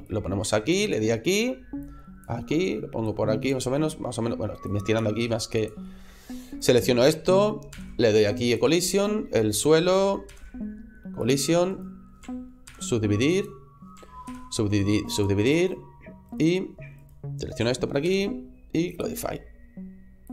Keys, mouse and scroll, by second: 0.8 middle click, 1.6 click, 2.2 middle click, 2.9 click, 3.5 middle click, 4.5 click, 5.0 s, 5.5 click, 5.7 middle click, 6.4 right click, 7.6 alt+c, 8.8 right click, 10.1 alt+c, 11.6 right click, 12.5 alt+c, 14.1 alt+c, 15.5 right click, 16.2 right click, 16.9 right click, 17.9 alt+c, 20.2 click.